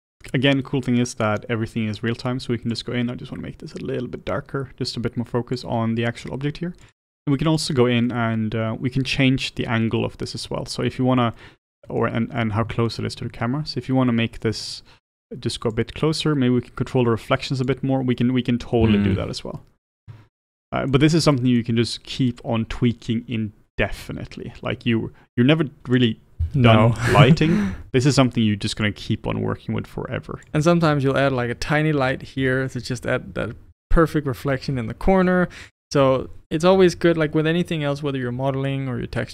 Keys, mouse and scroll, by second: 0.4 click, 3.8 click, 6.9 click, 7.7 click, 8.1-14.7 middle drag, 14.7 click, 15.8-18.2 drag, 18.2-20.3 middle drag, 20.3 ctrl+z, 20.6-24.9 middle drag, 24.9 r, 26.4 g, 27.7-28.9 middle drag, 28.9-30.9 drag, 30.9-35.4 middle drag, 32.8-35.4 scroll up 3, 35.4 click, 35.7 q, 36.8 q.